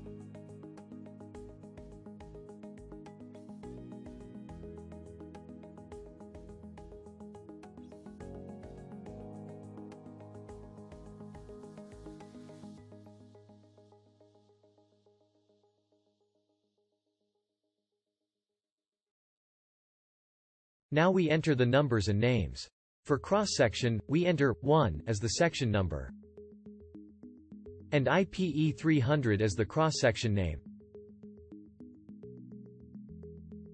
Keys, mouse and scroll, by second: 10.0-12.1 alt+drag.